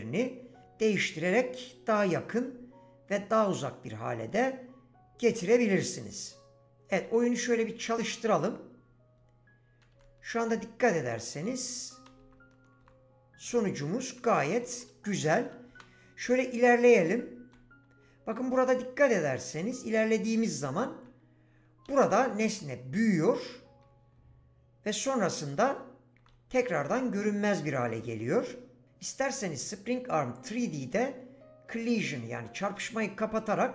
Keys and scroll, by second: 9.2-20.1 typing, 21.8 s, 23.0 w, 24.1 s, 25.6-26.8 typing.